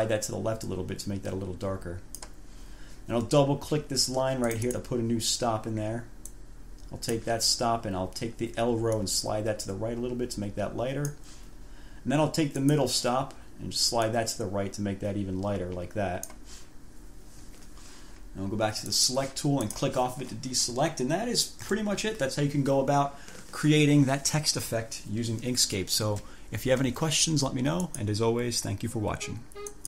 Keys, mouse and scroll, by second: 0.0-2.6 drag, 4.6 click, 6.5-7.6 drag, 9.1-11.5 drag, 12.8 click, 14.2-16.7 drag, 19.0 click, 19.8 click, 21.8 1, 28.0 click, 29.8 click.